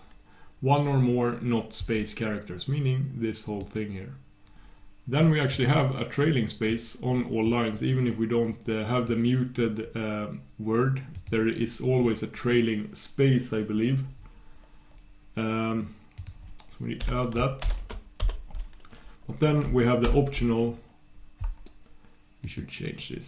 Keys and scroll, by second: 18.4 super+\.